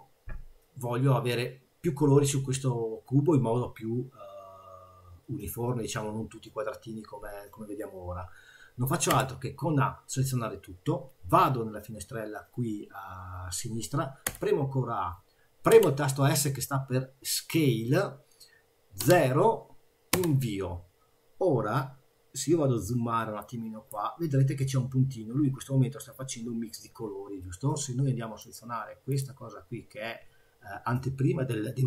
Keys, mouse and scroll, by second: 9.1 a, 14.2 a, 15.9 s, 22.0-22.6 scroll up 2, 23.4 click, 24.1 scroll up 2, 28.5 click, 29.1 click.